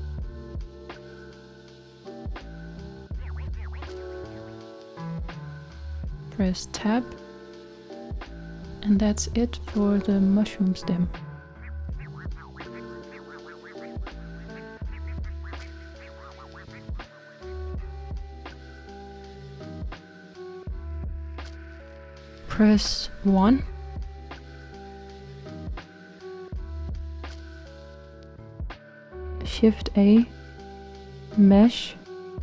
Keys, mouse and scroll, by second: 1.1-2.3 scroll down 4, 2.3-5.9 middle drag, 5.9 Tab, 7.5-13.9 middle drag, 17.0 shift+middle click, 18.4-18.9 scroll up 1, 18.9-21.9 middle drag, 23.2-24.8 shift+middle drag, 24.8-25.2 scroll down 3, 25.2-27.4 middle drag, 27.4 KP_1, 29.4 shift+a.